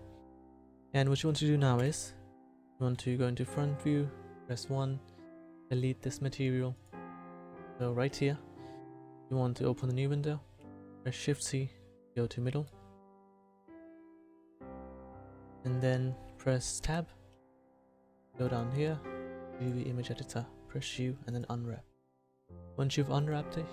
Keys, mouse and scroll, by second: 1.8 KP_1, 1.8 KP_4, 3.0 KP_1, 11.3 shift+c, 16.8 Tab, 20.8 u.